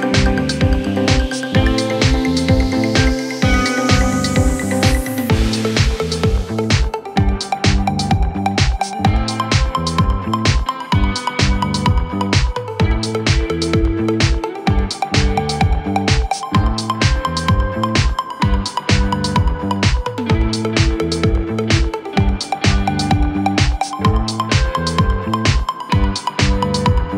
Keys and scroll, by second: 2.2 Delete, 6.2 Delete, 21.2 shift+F2, 21.5 F3.